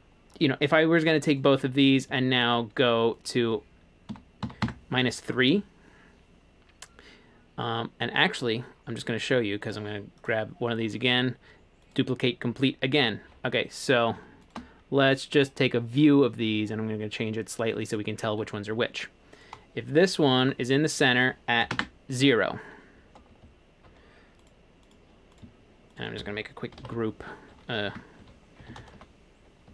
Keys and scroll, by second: 4.2-5.0 typing, 7.3 typing, 21.7 0, 21.8 Return, 26.8 super+g, 28.0-29.7 typing.